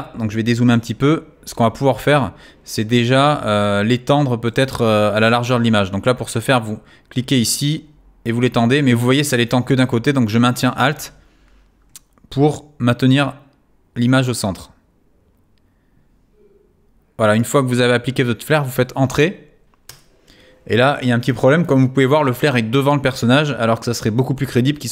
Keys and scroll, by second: 19.9 Return, 24.6 v.